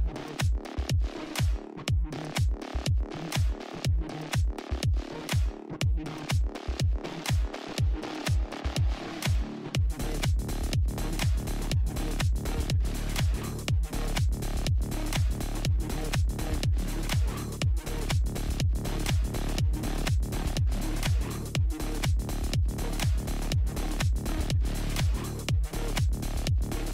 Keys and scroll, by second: 17.9-19.0 typing, 25.6 alt+i, 26.1 alt+space.